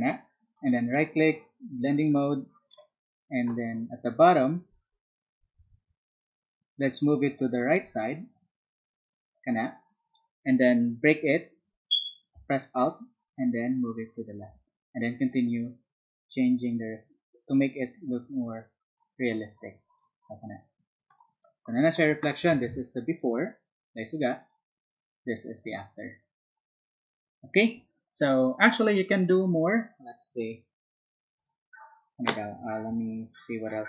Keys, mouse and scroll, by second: 0.6 right click, 2.0 click, 7.3-10.1 drag, 12.9-14.4 alt+drag, 15.3-19.9 alt+drag, 23.0 alt+click, 24.4 alt+click, 31.4 alt+click.